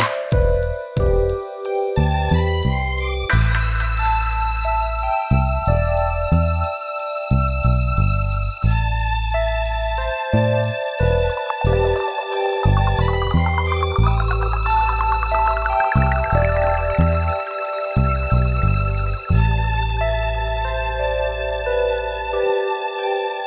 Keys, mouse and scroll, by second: 0.7 scroll down 2, 3.5 click, 3.6 click, 5.3 click, 5.4 click, 9.7 right click, 9.8 right click, 10.4 click, 13.3 click, 13.4 click, 15.7 click, 18.7 click, 20.5 click, 22.2 click.